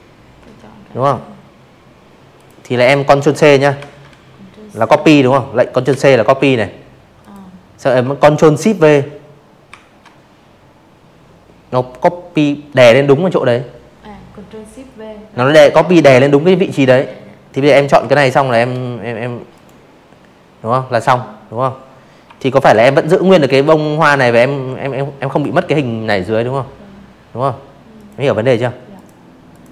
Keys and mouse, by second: 0.7 ctrl+c, 2.8 ctrl+c, 4.1 click, 6.6 ctrl+shift+v, 14.8 v, 15.3 shift+click, 16.5 click, 19.7 shift+x, 22.2 click, 24.9 click, 25.9 click, 26.4 click, 27.1 ctrl+z, 27.5 ctrl+z, 27.9 click, 28.4 ctrl+z, 28.9 click, 29.2-29.7 drag.